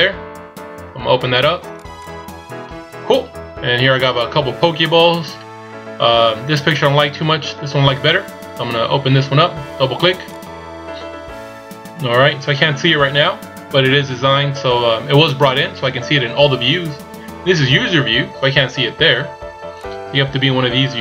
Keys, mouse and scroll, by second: 10.4 click, 17.7-18.0 scroll up 4, 18.0-18.6 scroll down 4, 18.6-19.9 scroll up 1, 19.9 click.